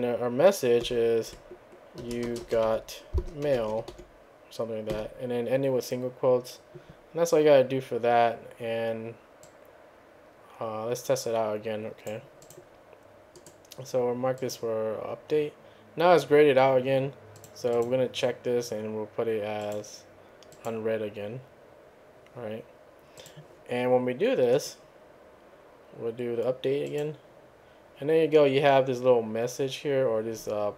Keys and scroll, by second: 0.8-4.9 typing.